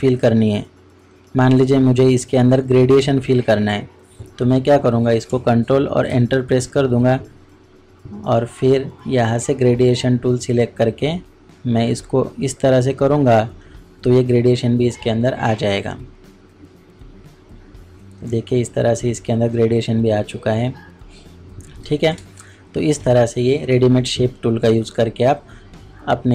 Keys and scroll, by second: 6.1 ctrl+Return, 22.1 ctrl+space.